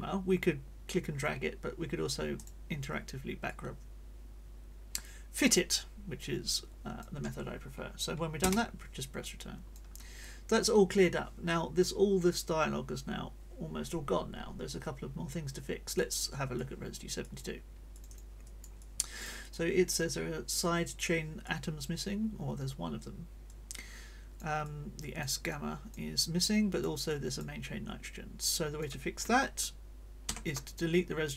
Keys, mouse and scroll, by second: 2.3 click, 3.5-7.2 drag, 8.4 Return, 9.2 click, 15.9 click, 16.5 click, 17.2 click, 17.9 click, 18.4 middle click, 18.5 click, 18.8 middle click, 21.4 click, 23.5-24.6 drag, 24.7 click, 25.4 middle click, 25.5 click, 26.1 middle click, 27.1 click, 28.5 click, 30.3 ctrl+d, 30.9 ctrl+click.